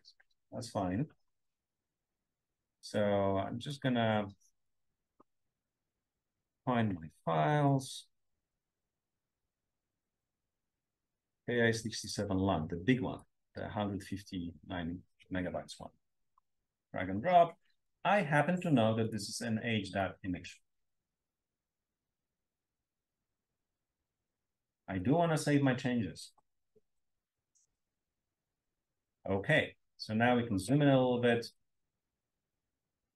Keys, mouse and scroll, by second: 17.8 click, 18.9 click, 22.4 click, 26.1 click, 29.6-33.1 scroll up 3, 31.4-31.8 drag, 32.4-32.7 drag.